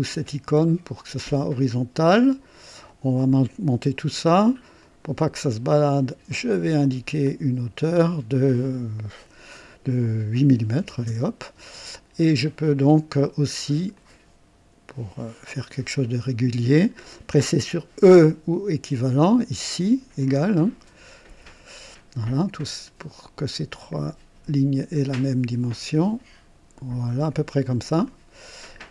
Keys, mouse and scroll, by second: 0.1 h, 2.7-3.9 drag, 4.7 click, 6.0 click, 7.2 click, 10.7 KP_8, 11.0 KP_Enter, 13.9 click, 15.9 click, 16.8 click, 21.2 e, 23.5-27.0 drag, 27.9 click.